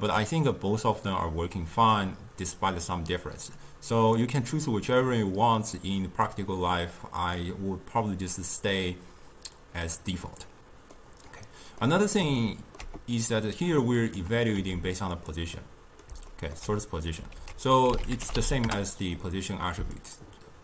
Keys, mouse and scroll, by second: 1.1-3.7 middle drag, 3.7 click, 7.3-10.4 drag, 11.0-13.4 middle drag, 13.4-14.7 drag, 14.7 g, 15.6 scroll up 2, 15.7-17.5 middle drag, 17.5 ctrl+a.